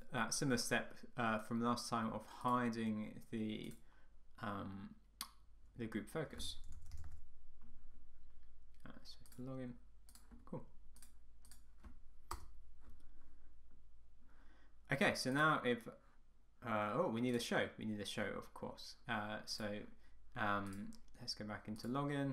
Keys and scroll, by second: 12.4 Return.